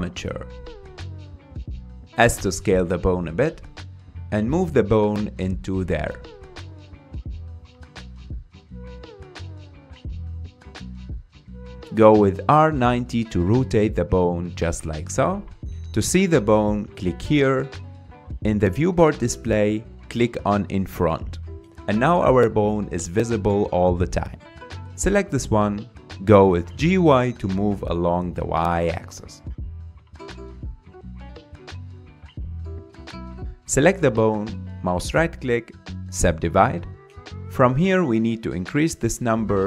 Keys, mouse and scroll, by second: 1.5 s, 3.1 g, 7.4-7.7 scroll up 7, 7.7-8.1 shift+middle drag, 8.1-9.7 scroll up 2, 9.7 g, 10.8-11.6 scroll down 5, 11.6 r, 16.8 click, 20.2 click, 21.6 click, 22.4-23.9 middle drag, 23.9 KP_3, 24.8 Tab, 26.2 click, 26.8 scroll down 2, 27.1-28.3 shift+middle drag, 28.3 g, 33.5 click, 35.5 right click, 36.8-38.6 right drag, 39.5-39.6 drag.